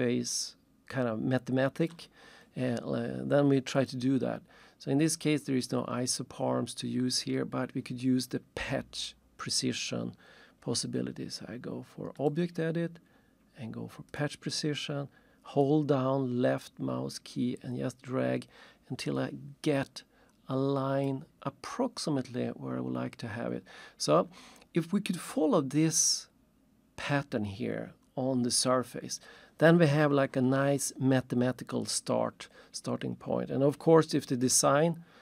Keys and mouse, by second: 3.7 click, 12.2 click, 14.1 click, 15.6 click, 21.1 click.